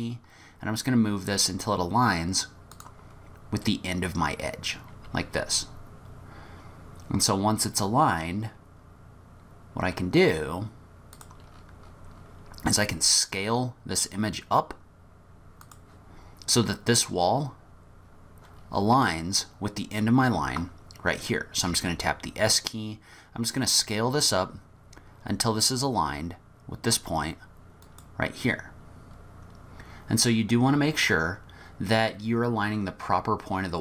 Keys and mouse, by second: 5.0 g, 11.4-12.3 middle drag, 13.0 s, 19.0 middle click, 19.6-21.5 middle drag, 21.7 s.